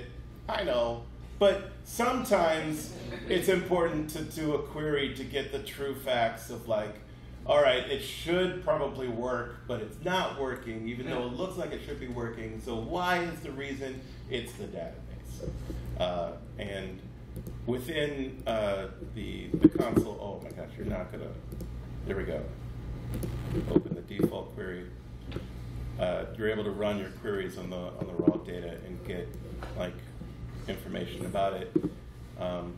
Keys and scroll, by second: 26.8 super+Return.